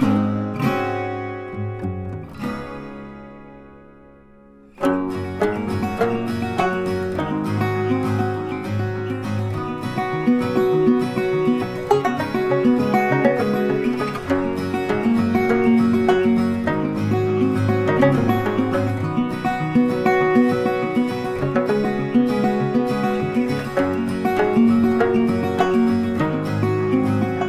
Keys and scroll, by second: 23.4 ctrl+t.